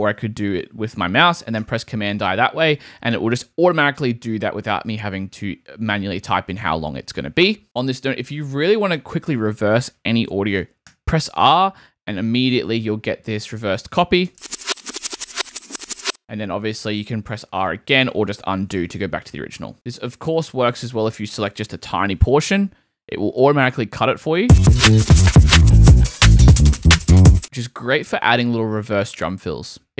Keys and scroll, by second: 1.6 super+i, 10.9 r, 14.3 space, 16.0 space, 18.6 super+z, 22.6 r, 24.4 space, 27.4 super+z, 27.4 super+space, 28.0 space.